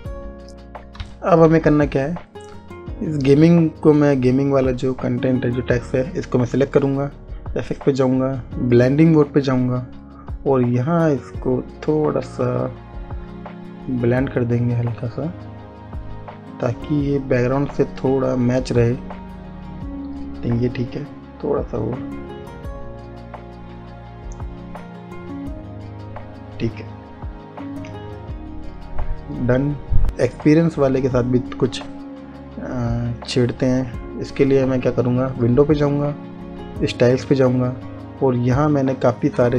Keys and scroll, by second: 1.7 space.